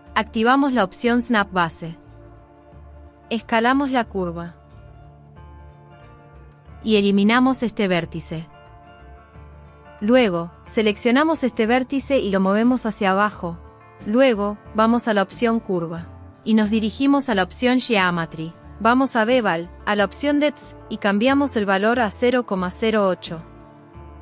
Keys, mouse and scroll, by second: 0.6 click, 1.2 g, 2.7 r, 3.4 s, 5.3 Tab, 8.1 Delete, 9.8 Delete, 11.1 g, 12.6 click, 15.6 click, 17.1 click, 20.5-22.8 drag.